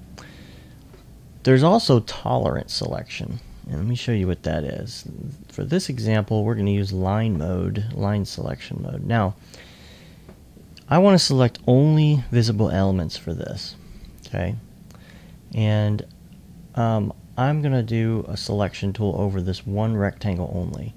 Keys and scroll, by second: 3.6 2, 4.2 2, 6.3-7.0 typing, 8.2 2.